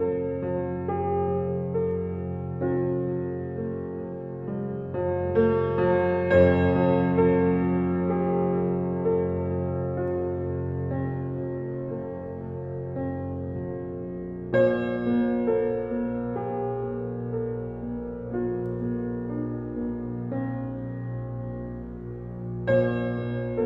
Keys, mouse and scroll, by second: 0.3 scroll down 2, 0.7 click, 1.0 scroll down 2, 2.9 click, 4.3 drag, 5.7-7.5 drag, 7.9 click, 8.3-9.4 drag, 10.2 click, 11.1 click, 12.3 alt+z, 13.5 click, 14.1-21.2 drag, 22.1 drag, 22.6-23.6 middle drag.